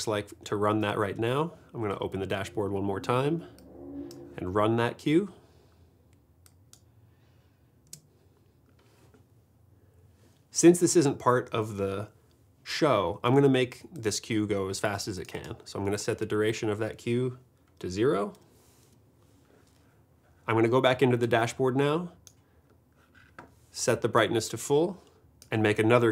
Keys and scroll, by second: 2.2 shift+super+d, 7.9 space, 9.3 space, 18.4 0, 18.8 Return.